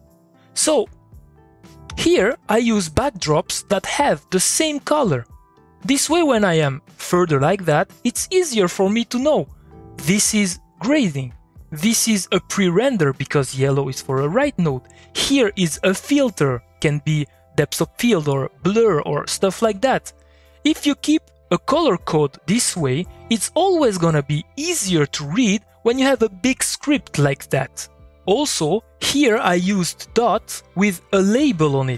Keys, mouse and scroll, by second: 2.2 middle click, 3.3 click, 3.5-5.2 middle drag, 5.5 middle click, 6.6 click, 7.2 middle click, 9.1 middle click, 19.7 middle click, 29.2 middle click, 29.3 click, 29.7 middle click, 29.9 click.